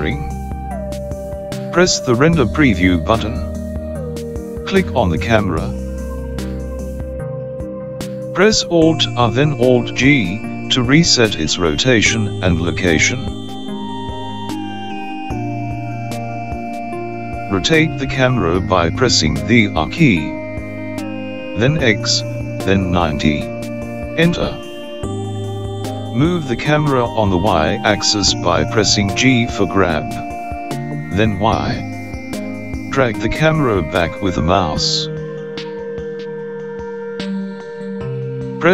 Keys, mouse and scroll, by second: 2.5 click, 4.3 click, 12.7 alt+r, 14.3 alt+g, 19.2 r, 28.1 g, 31.1 y.